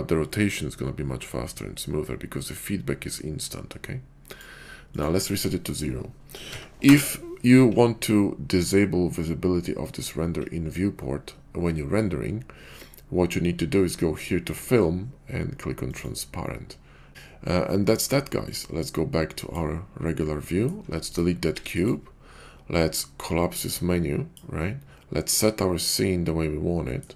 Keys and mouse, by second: 0.3-4.4 drag, 4.9-7.0 drag, 14.2 click, 15.9 click, 19.5 click, 20.1-20.7 middle drag, 21.1 click, 21.5 x, 23.7 click, 25.2-27.0 middle drag.